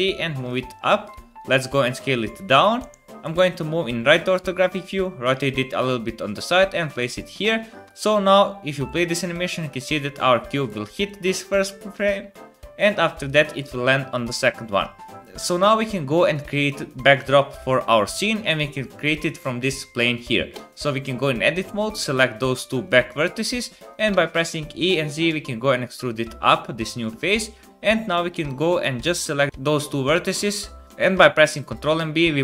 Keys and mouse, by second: 1.1 s, 2.8 KP_1, 3.2 KP_3, 4.5 r, 5.6 g, 7.8 space, 9.8 click, 10.0 click, 10.6 click, 10.6 middle click, 10.6 right click, 11.0 click, 11.0 middle click, 11.0 right click, 12.0 click, 12.0 middle click, 12.0 right click, 13.2 click, 13.2 middle click, 13.2 right click, 14.8 space, 20.5 Tab, 21.6 click, 21.6 middle click, 21.6 right click, 22.8-24.8 drag, 22.8-24.8 middle drag, 22.8-24.8 right drag, 24.1 e, 26.3-27.6 drag, 29.5 ctrl+b, 31.5 ctrl+b.